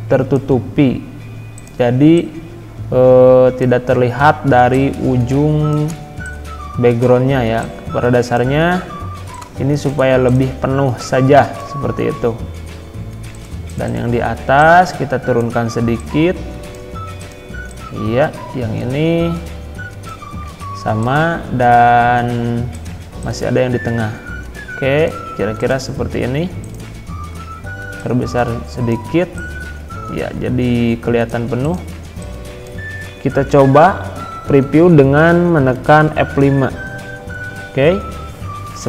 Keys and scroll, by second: 36.3 F5.